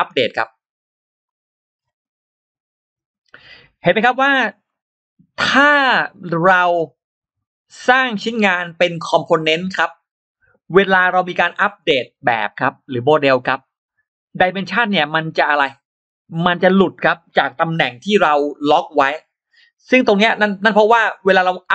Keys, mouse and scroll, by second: 1.1 click, 3.6-4.2 scroll up 3, 4.5 scroll down 2, 8.3-8.6 scroll down 2, 8.7-9.3 scroll up 2, 11.9 scroll down 2, 12.6-12.9 scroll down 2, 13.0-13.3 scroll up 2.